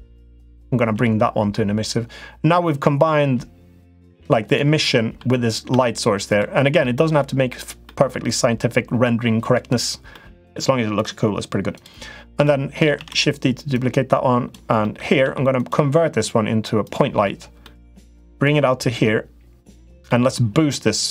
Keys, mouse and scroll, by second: 0.7 g, 4.6 middle click, 5.5 Tab, 6.0 click, 6.6 middle click, 7.6 middle click, 9.9 middle click, 10.7 click, 12.8 shift+d, 13.5 click, 14.7 middle click, 15.0 s, 16.6 click, 17.5 middle click, 18.2-19.7 drag, 20.0 middle click, 21.0-21.1 drag.